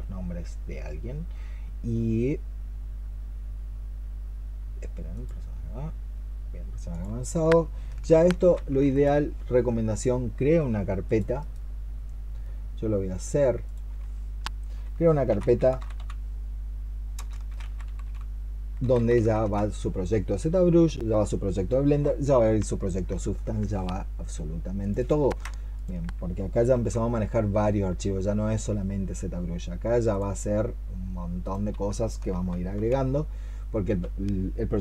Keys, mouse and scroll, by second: 8.2 ctrl+c, 11.2 right click, 14.9-19.5 typing, 24.8 double click, 26.6 double click, 32.2 ctrl+v, 32.6 Return.